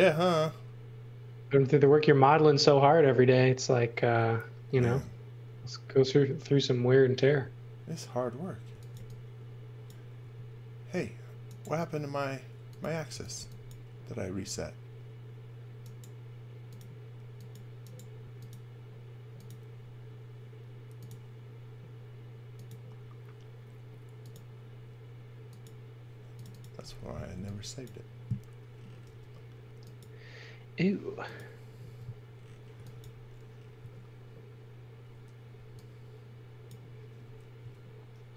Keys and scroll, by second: 6.6 space, 8.4-10.1 typing, 13.0 x, 13.3 v, 14.3 space, 27.3 x, 29.1 i, 31.8 e, 32.8 x, 33.0 v, 33.8 a, 35.6 e, 37.6 l.